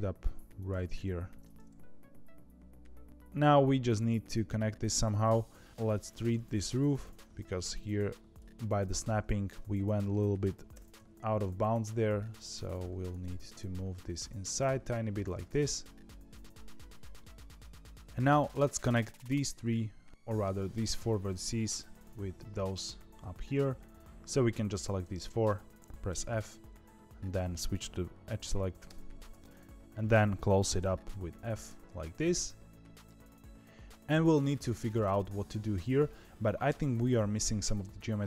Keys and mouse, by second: 1.3-4.5 middle drag, 5.7 shift+KP_7, 7.8 click, 9.2 shift+middle click, 10.7 g, 12.7 click, 13.1 g, 15.4-18.0 middle drag, 19.0 click, 24.1 ctrl+z, 24.1 f, 24.4 click, 26.0 f, 26.8 2, 28.9 ctrl+z, 30.7 f, 31.6 f.